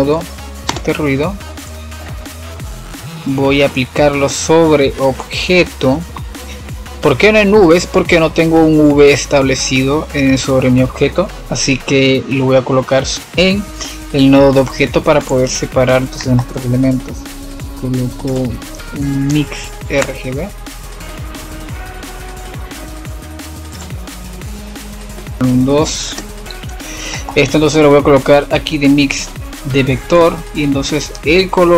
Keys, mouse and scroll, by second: 0.6 F7, 1.8-4.7 middle drag, 4.7 drag, 7.1-13.5 drag, 13.5-27.2 middle drag, 29.6-31.6 middle drag, 31.6-31.7 drag.